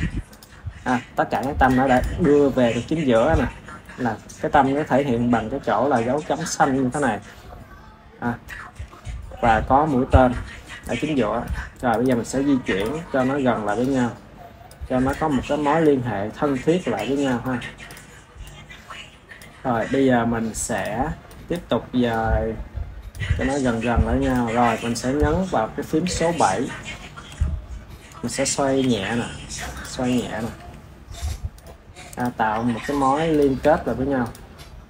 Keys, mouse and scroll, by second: 1.2 click, 1.8 click, 7.4-7.8 scroll up 6, 8.3-10.5 shift+middle drag, 10.5-11.3 scroll down 7, 11.3 click, 11.9 click, 12.2-12.6 scroll up 4, 12.6 click, 13.7 click, 14.9 click, 15.7 click, 17.3-17.8 shift+middle drag, 17.8 click, 20.7 click, 22.0-23.0 drag, 24.2 click, 27.2 KP_7, 28.7 r, 30.0 click, 30.4 r, 32.0 drag, 32.4 r, 33.5 KP_1, 34.1 click.